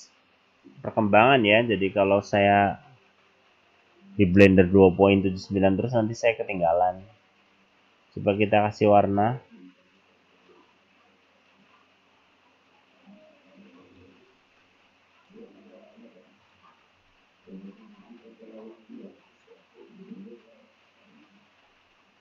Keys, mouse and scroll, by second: 0.7-1.1 scroll down 2, 4.5 middle click, 8.2 click, 9.4-9.8 scroll down 5, 14.7 click, 16.9-18.2 scroll up 7.